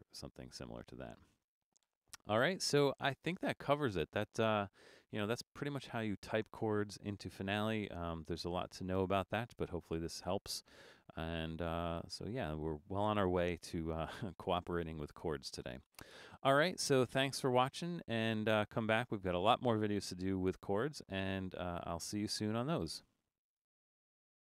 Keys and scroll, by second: 20.1 typing, 22.5-23.2 typing.